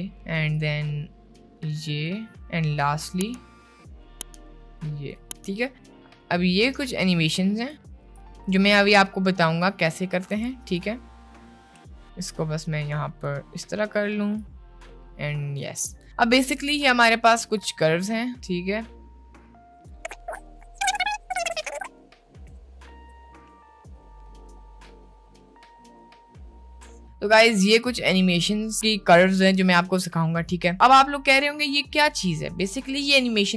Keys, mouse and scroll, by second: 0.7-2.1 drag, 3.6-5.3 drag, 5.7-7.8 drag, 8.1-10.2 drag, 10.8 click, 12.3-13.3 drag, 14.4-15.7 drag, 17.6-21.6 ctrl+drag, 21.8 ctrl+click, 22.2 ctrl+click, 22.9 click, 23.4 click, 24.5 click, 24.9 click, 26.1 click, 27.0 click, 27.7 h, 28.5 ctrl+z, 29.7 shift+middle click.